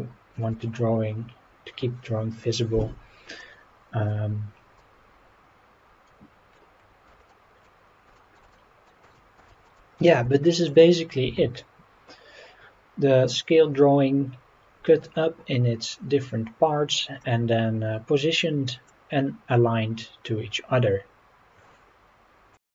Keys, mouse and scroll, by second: 0.3 shift+click, 0.7-1.0 scroll up 2, 1.7-2.0 scroll up 3, 2.1-3.2 scroll down 6, 3.4-4.1 middle drag, 4.8-6.5 middle drag, 6.8 scroll down 1, 7.0 Tab, 7.3-7.6 middle drag, 7.8 scroll down 1, 8.1 shift+middle drag, 8.5-8.9 middle drag, 9.0 click, 9.5 shift+middle drag, 10.0 scroll down 1, 10.3-10.6 shift+middle drag, 17.2-18.9 middle drag.